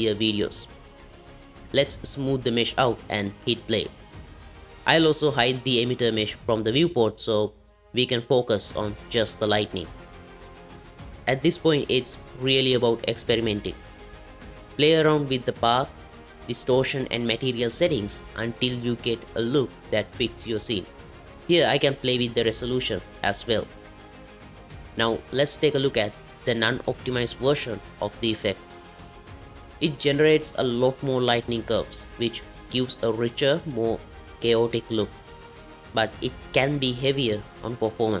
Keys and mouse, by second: 2.4 click, 2.8 space, 5.1 space, 6.7-8.3 drag, 8.3 space, 10.8 space, 15.1-18.9 drag, 20.6 ctrl+z, 22.2-23.8 drag, 25.9 ctrl+z, 27.6 click, 28.4 click.